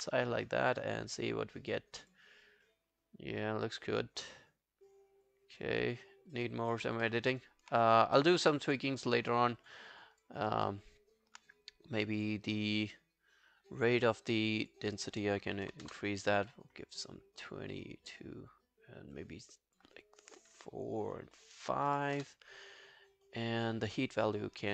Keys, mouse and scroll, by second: 7.1 alt+middle click, 7.3 alt+right click, 10.7 alt+middle click, 13.9 scroll down 1, 15.7 2, 15.9 Return, 21.9 5, 22.2 Return.